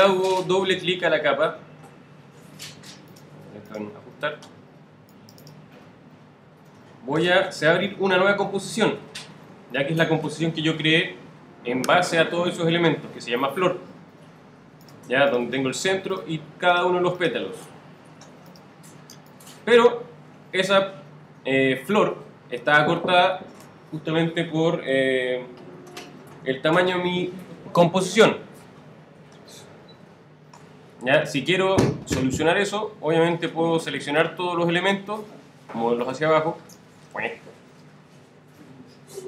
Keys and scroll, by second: 18.3 alt+z, 19.1 alt+space, 37.0 super+z, 37.6 shift+super+z, 38.0 shift+super+Down.